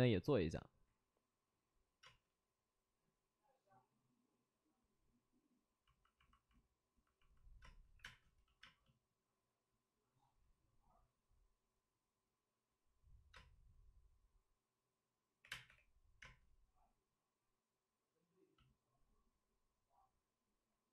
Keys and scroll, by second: 2.0 space, 7.6 space, 7.9 3, 8.0 space, 8.6 space, 13.3 space, 15.4 3, 15.6 space, 15.6 3, 16.2 space.